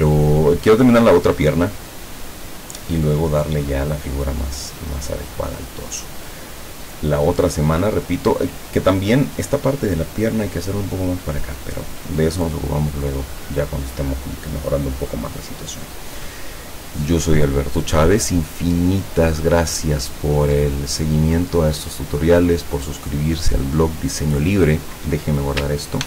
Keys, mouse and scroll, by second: 0.3 click, 21.9 click, 23.2 click.